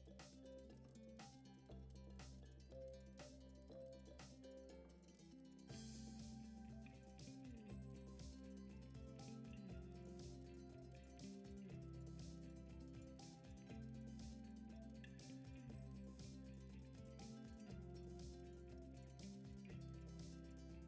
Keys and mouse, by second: 0.3 r, 1.1 r, 2.3-2.7 middle drag, 2.9 g, 4.1 KP_1, 5.1 s, 6.4-6.7 middle drag, 6.8 g, 8.2 KP_1, 9.1 r, 10.1 g, 14.1 click, 14.6 shift+d, 15.8 r, 18.6 s, 18.9 r, 20.3 g.